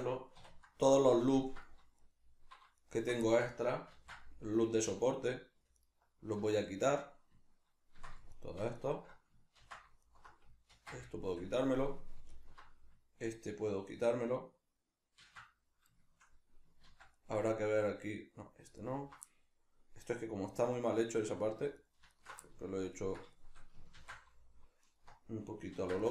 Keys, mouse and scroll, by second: 0.4 2, 2.0 alt+right click, 2.8 alt+right click, 3.2-5.8 shift+middle drag, 4.0 ctrl+x, 5.8 alt+right click, 8.3 alt+right click, 8.8 alt+shift+right click, 9.6 ctrl+x, 10.0 alt+right click, 10.7 ctrl+x, 11.1-12.3 shift+middle drag, 12.3 alt+right click, 15.2 ctrl+x, 16.0-18.8 shift+middle drag, 16.9 ctrl+z, 18.8 alt+right click, 19.2-21.8 middle drag, 21.8 alt+right click, 22.1 alt+shift+right click, 22.4-24.8 ctrl+middle drag, 24.0 ctrl+x, 24.8 alt+right click, 25.8 ctrl+x.